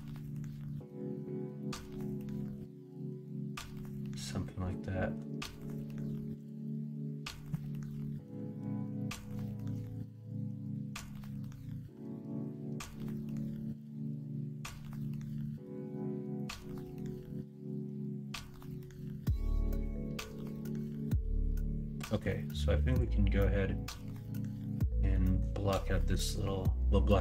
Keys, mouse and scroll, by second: 8.0 middle drag, 8.6 middle drag, 9.0 middle drag, 9.4 shift+middle drag, 10.0-10.7 middle drag, 11.2-14.8 middle drag, 15.2 middle drag, 15.9-18.3 middle drag, 18.6-19.5 middle drag.